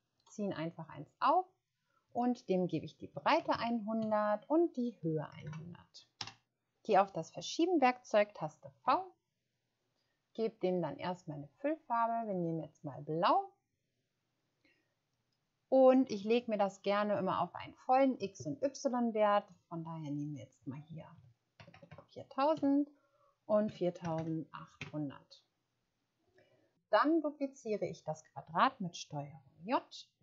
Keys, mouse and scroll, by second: 3.1-6.0 typing, 4.5 Tab, 6.1 Return, 8.8 v, 21.1-24.5 typing, 22.5 Tab, 24.8 Return.